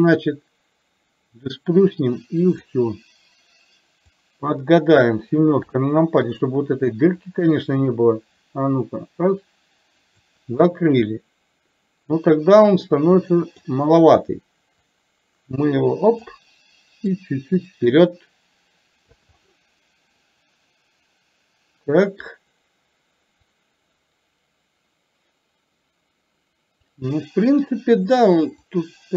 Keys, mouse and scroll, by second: 4.3-5.3 drag, 5.7 KP_7, 7.4-10.3 drag, 10.7-13.8 middle drag, 15.2-16.4 drag, 17.3-19.3 drag, 19.4-22.3 middle drag, 23.5-26.9 drag, 28.9 click.